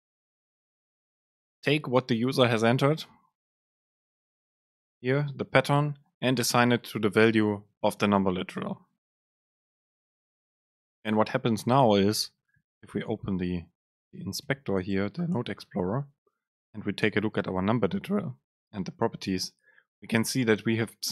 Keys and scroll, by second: 14.6 ctrl+x.